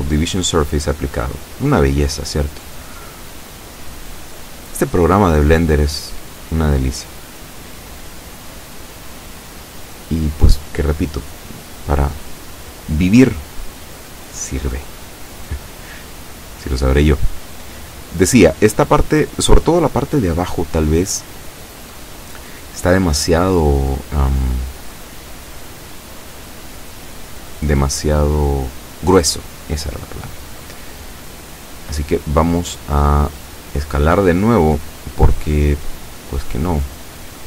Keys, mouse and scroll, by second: 0.3 a, 1.1-1.7 scroll up 2, 3.1-3.5 scroll down 2, 8.1-8.5 scroll up 2, 8.6 scroll down 2, 10.9 Tab, 12.4 z, 15.0-17.4 middle drag, 27.3-29.0 middle drag, 29.3 Tab, 29.6-35.5 middle drag, 35.8-36.3 scroll up 1, 36.6 shift+middle click.